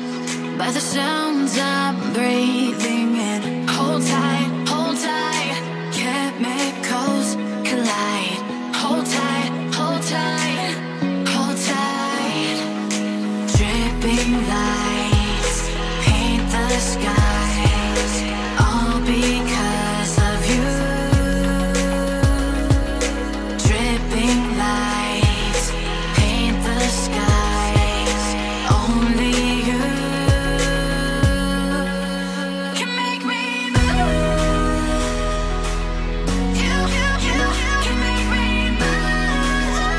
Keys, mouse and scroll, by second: 4.6 scroll down 2, 6.6 scroll down 3, 6.6 shift+middle click, 10.6 shift+middle click, 11.5 shift+middle click, 12.2 middle click, 19.1 scroll down 2, 19.3 middle click, 27.5 Escape, 27.7 Escape, 35.3 Escape, 35.5 Escape, 35.6 scroll down 1, 36.6 scroll down 4, 36.6 shift+middle click, 37.8-38.3 scroll up 2.